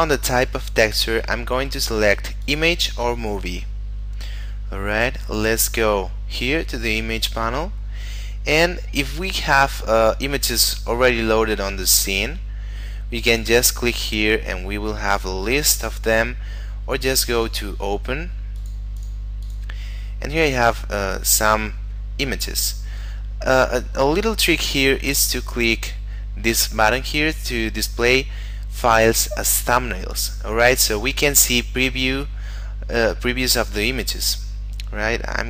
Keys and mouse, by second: 2.4 click, 3.8 middle click, 13.2 click, 15.7 click, 30.1 click.